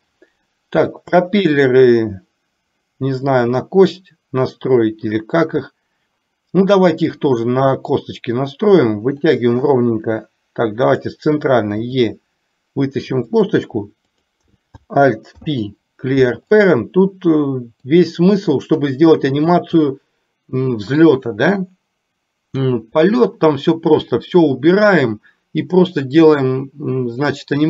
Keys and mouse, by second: 9.2 click, 11.1 click, 11.9 e, 14.2 click, 15.5 alt+p, 17.8 click.